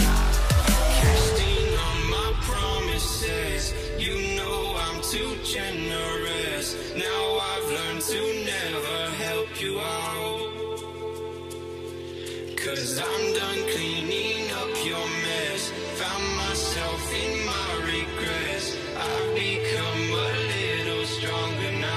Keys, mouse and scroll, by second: 4.2 Return, 6.1 ctrl+t, 7.8 Return, 10.9 alt+scroll down 1, 18.7 Return, 18.9 Return, 19.8 v, 20.6 shift+click.